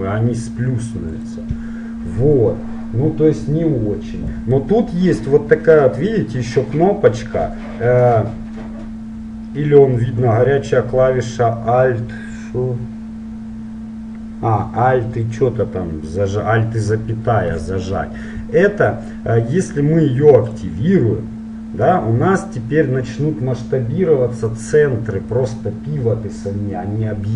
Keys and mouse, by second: 20.5-22.4 drag.